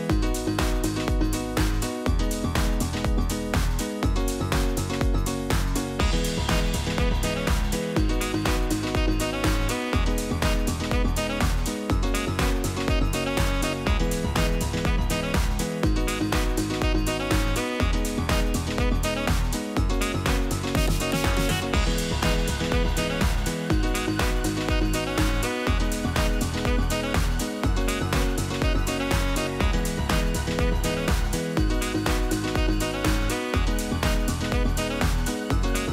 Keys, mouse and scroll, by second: 0.0 click, 0.7-1.0 middle drag, 1.0-1.9 drag, 1.9 e, 5.6 middle click, 6.3 scroll down 1, 6.4-6.9 shift+middle drag, 6.9 ctrl+r, 12.8 middle click, 13.2 KP_7, 13.6 shift+middle click, 13.9-14.2 scroll up 1, 14.2 shift+middle click, 14.8 click, 15.5 g, 17.4 click, 18.7 shift+click, 19.5 g, 23.1 scroll down 3, 23.3 middle click, 24.1-24.4 scroll down 1, 24.4-25.0 scroll up 1, 25.0-26.0 scroll down 1, 26.0 click, 28.4 drag, 29.0 ctrl+r, 30.4 click, 31.2 g, 33.1 click, 33.7 click, 34.3 g, 35.3 click, 35.8 g.